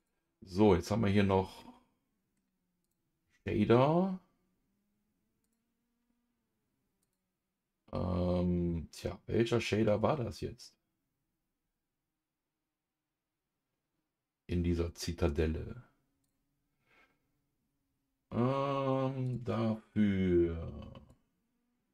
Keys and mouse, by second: 1.6 middle click, 2.8 click, 5.4 click, 7.1-21.3 drag.